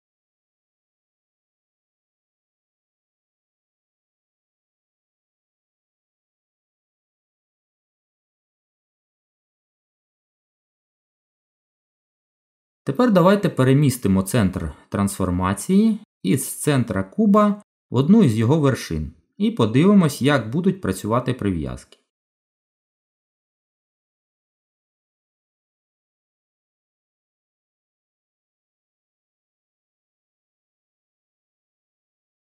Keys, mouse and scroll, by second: 8.6 z, 11.8 middle click, 19.4 middle click, 22.6 Tab, 25.2 click, 26.3 middle click, 28.8 click, 29.3 middle click.